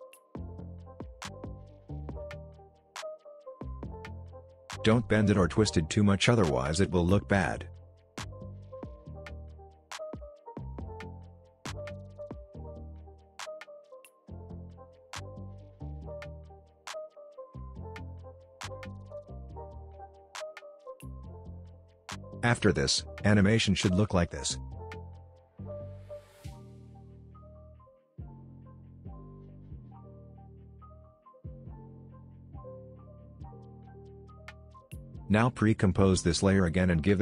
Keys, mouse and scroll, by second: 3.0 typing, 6.7-10.4 drag, 10.4-12.2 drag, 12.5-14.4 drag, 15.3-18.6 drag, 18.9-19.4 alt+scroll up 2, 20.5-21.3 shift+click, 22.8 click, 23.6 space, 25.1 space, 25.8-27.2 drag, 27.2 ctrl+z, 27.7-33.1 drag, 35.9 right click, 36.8 click.